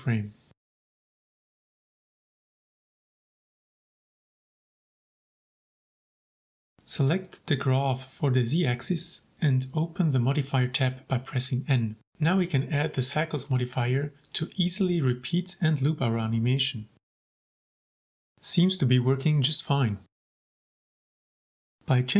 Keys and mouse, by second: 1.0 ctrl+s, 2.3 shift+drag, 3.0 shift+click, 3.9 shift+click, 5.6-6.4 drag, 6.6 shift+middle click, 6.8-7.2 middle drag, 8.9 n, 10.5 click, 11.8 right click, 13.7-14.8 drag, 16.1 click, 18.7 click.